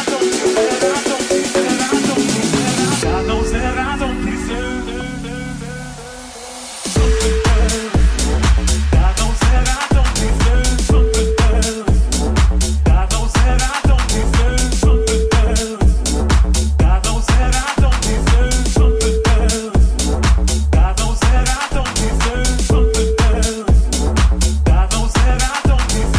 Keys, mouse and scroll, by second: 0.0 middle click, 0.4-8.9 middle drag, 1.9 right click, 8.8-20.5 drag, 8.8 right click, 11.2 middle click, 11.2 right click, 11.5 Tab, 11.8 right click, 12.7 ctrl+z, 20.5 Tab, 21.0-26.1 drag, 23.8 middle click, 23.8 right click, 24.4 shift+s, 25.1 Tab.